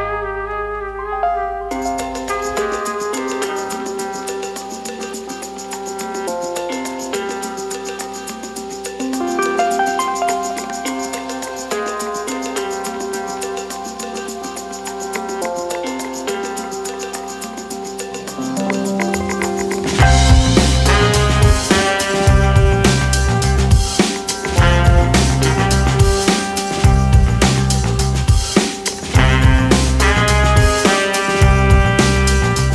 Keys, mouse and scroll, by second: 1.8-3.4 middle drag, 3.4 r, 5.8 middle click, 6.4 g, 10.0 middle click, 11.0 g, 12.7 middle click, 13.3-13.9 scroll down 5, 13.9-14.3 scroll up 1, 14.3-15.4 middle drag, 15.4 Tab, 16.0-16.5 scroll down 2, 16.5 click, 16.8-17.5 middle drag, 17.5 shift+a, 20.0-22.2 drag, 22.2-22.8 scroll up 1, 22.8 Tab, 23.9 g, 26.3-27.1 scroll up 3, 27.1 Tab, 28.6 Tab, 29.2 1, 29.6 shift+scroll up 1, 29.6 shift+middle click, 30.2 f, 30.4-31.3 scroll up 2, 31.3 3, 32.1 right click.